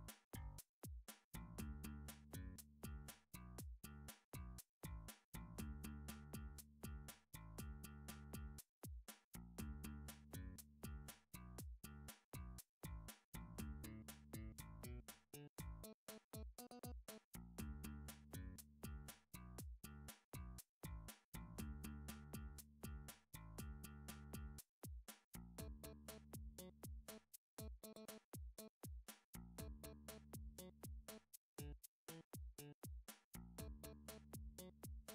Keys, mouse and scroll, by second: 0.9 a, 1.8 click, 3.0 click, 4.3 shift+middle click, 5.2 alt+click, 6.8 alt+z, 8.0 alt+z, 8.9 click, 9.3 click, 9.6 c, 10.2 click, 10.3 right click, 10.8 e, 12.5 click, 13.5 m, 14.2 click, 15.2 middle click, 15.3 scroll, 17.0 scroll down 4, 18.2 middle click, 18.5 scroll down 2, 18.7 middle click, 19.3 middle click, 19.3 7, 19.5 scroll up 2, 19.6 scroll down 2, 20.7-21.2 scroll up 4, 21.7 2, 22.3 shift+middle click, 22.9 alt+click, 28.3-28.8 typing, 29.8 right click, 30.4 y, 30.4 s, 30.7 x, 32.0 click, 32.8 alt+click, 34.3 s.